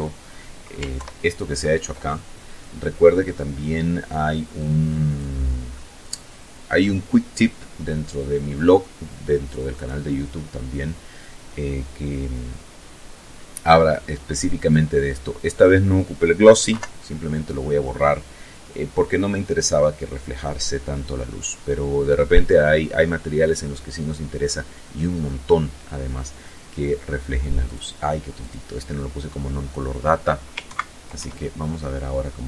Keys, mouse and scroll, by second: 3.4 click, 4.6-6.4 middle drag, 13.5 click, 15.5 Delete, 24.3-25.9 middle drag, 26.4 click, 27.2 click, 29.5 ctrl+Right, 30.0 ctrl+F12.